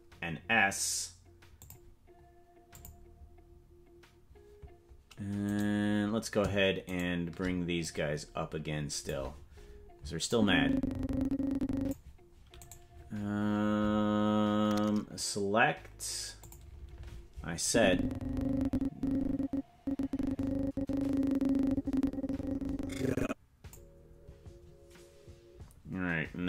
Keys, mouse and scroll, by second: 1.6 click, 2.7 click, 5.7 right click, 7.2 shift+right click, 7.8-9.0 drag, 10.3-11.9 drag, 12.8 right click, 16.4 click, 17.6-23.7 drag.